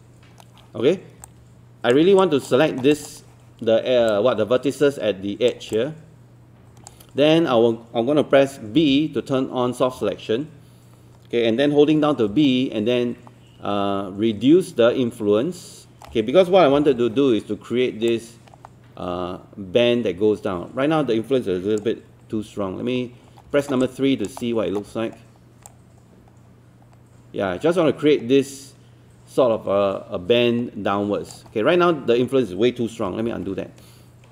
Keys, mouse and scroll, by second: 2.2 alt+click, 2.7 alt+middle click, 2.9 alt+click, 4.1 alt+click, 5.8-7.0 alt+drag, 8.8 b, 12.5 middle click, 12.8 typing, 17.0 middle click, 17.0 typing, 18.1-22.0 drag, 22.4 3, 23.3 scroll up 1, 23.6 alt+middle click, 23.8 alt+click, 24.4 alt+middle click, 25.7-32.0 drag, 33.2 ctrl+z.